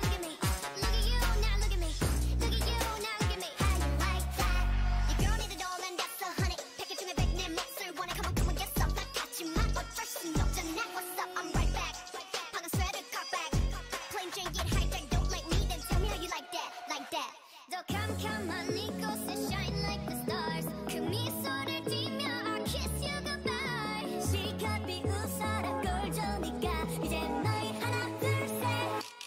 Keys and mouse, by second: 7.6 z, 9.2-10.8 right drag, 9.7 Tab, 11.5 Tab, 13.3 ctrl+j, 13.7 Tab, 14.5 a, 15.7 ctrl+Tab, 16.9-18.9 drag, 17.8 o, 18.3 g, 22.3-24.4 right drag, 23.4 g, 27.9 z, 28.6-29.2 right drag.